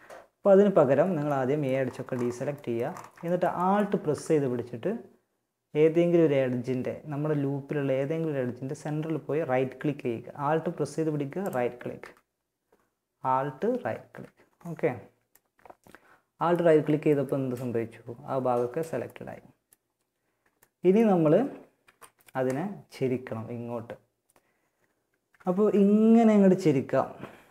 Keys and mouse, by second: 0.7 middle click, 1.8 middle click, 14.9 middle click, 15.9 middle click, 18.5-20.4 middle drag, 21.1 KP_1, 24.9 r, 27.4 r.